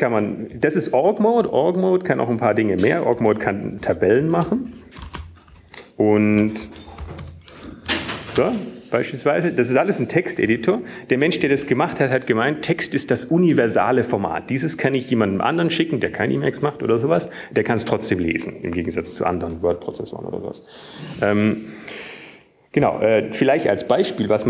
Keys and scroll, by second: 5.1-7.2 typing, 8.8 Tab, 8.8 typing, 10.3-11.3 typing, 12.3 Right.